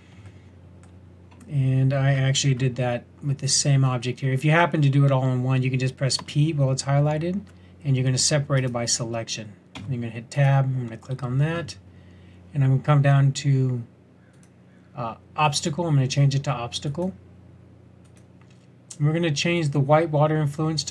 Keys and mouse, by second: 6.1 p, 9.7 Tab, 14.3-20.9 drag.